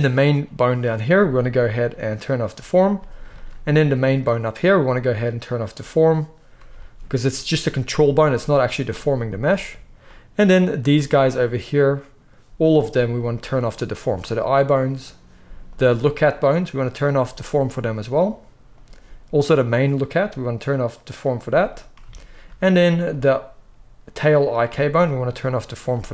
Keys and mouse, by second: 2.4-4.0 middle drag, 4.0-5.6 drag, 5.6-10.9 middle drag, 10.9 click, 11.0-13.1 middle drag, 13.1 click, 13.2 middle click, 13.8 click, 13.9-14.9 middle drag, 14.9 click, 15.0 middle click, 15.6 click, 15.7-16.7 middle drag, 16.7 click, 16.8-18.6 middle drag, 18.6 click, 18.8-19.4 middle drag, 19.4 click, 19.5-21.0 middle drag, 21.0 click, 21.0-23.0 middle drag, 23.0 click, 23.1-25.0 middle drag, 25.0 click, 25.2-26.1 middle drag.